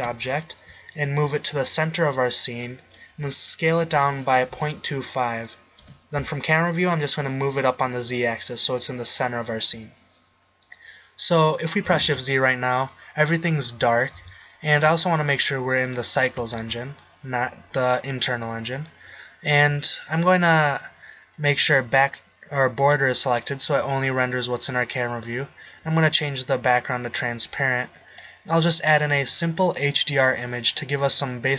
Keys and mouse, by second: 0.3 KP_7, 4.0 s, 6.1 KP_0, 12.3 shift+z, 14.3 z, 16.8 shift+z, 22.1-24.6 drag, 25.7-26.9 middle drag, 26.9 click.